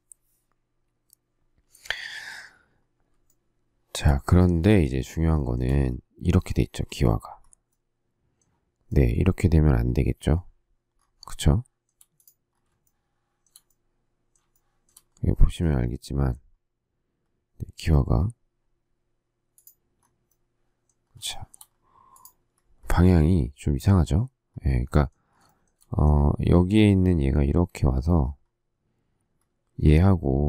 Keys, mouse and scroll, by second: 3.2 shift+middle click, 5.4 shift+middle click, 11.3 shift+middle click, 12.8 shift+middle click, 14.5 shift+middle click, 21.3 shift+middle click, 25.5 shift+middle click.